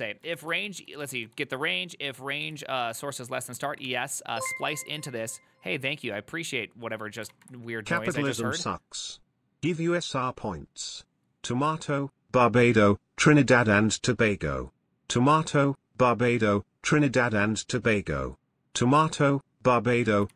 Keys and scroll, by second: 0.5-5.1 typing, 7.2-8.7 typing.